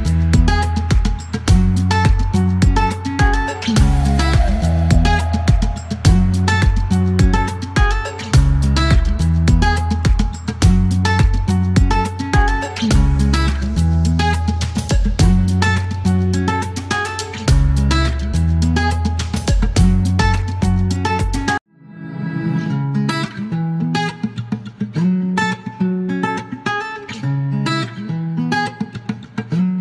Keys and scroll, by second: 0.0-1.1 typing, 2.0 ctrl+c, 3.6 Delete, 4.2 ctrl+v, 4.5 space, 4.6 KP_2, 4.8 Return, 6.8 alt+g, 8.5-10.6 typing, 12.7 typing, 14.2-16.5 typing, 14.4 Return, 17.8 e, 22.1 typing, 23.7-24.8 typing, 26.4 typing, 28.0 KP_Subtract, 28.1 KP_Decimal, 28.2 KP_6, 28.3 Return, 29.6 KP_5, 29.7 Return.